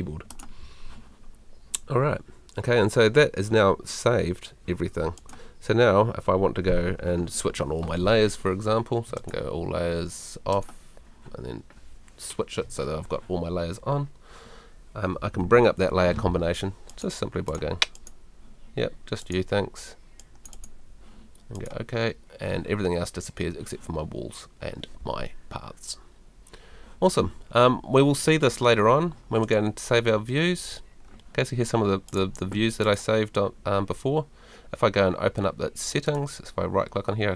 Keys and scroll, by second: 15.4 super+l.